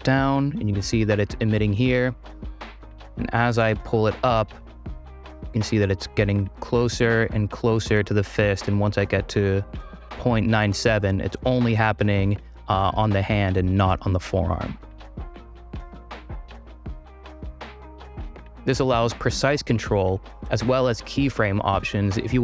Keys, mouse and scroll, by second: 1.8-6.7 drag, 7.5-9.7 drag, 17.4 space, 17.8 ctrl+r.